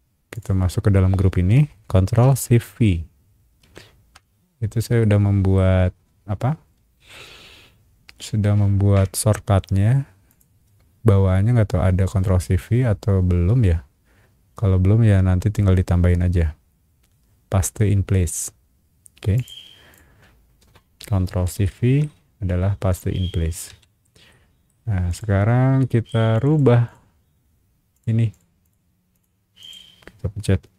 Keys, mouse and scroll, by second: 0.3 click, 3.6 ctrl+shift+v, 5.0 middle click, 10.3 click, 19.3 click, 19.9 click, 20.3 scroll up 1, 21.6 shift+middle click, 22.5 scroll down 1, 22.7 space, 23.7 Escape, 24.3 middle click, 25.1 click, 25.8 middle click, 26.3 click, 26.5 click, 26.8 click, 27.9 click, 28.3 click, 28.6 click, 29.1 click, 29.6 click.